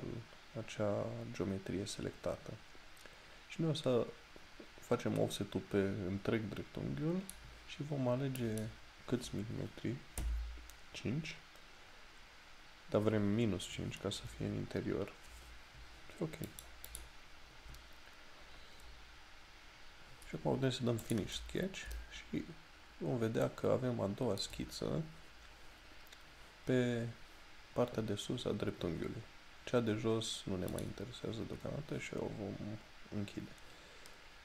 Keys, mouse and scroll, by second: 13.8 BackSpace, 16.5 click, 18.4-18.9 scroll down 1, 21.1 click, 22.1 shift+middle click, 31.1 click.